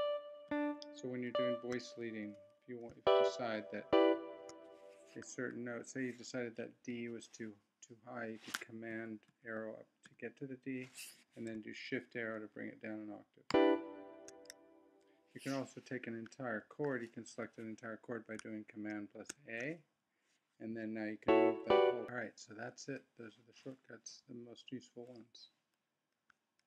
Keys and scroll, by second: 0.5 shift+Down, 1.3 shift+Up, 2.2 Left, 3.0 shift+Up, 3.9 shift+Down, 8.9 super+Up, 13.5 shift+Down, 19.3 super+a, 21.2 Up.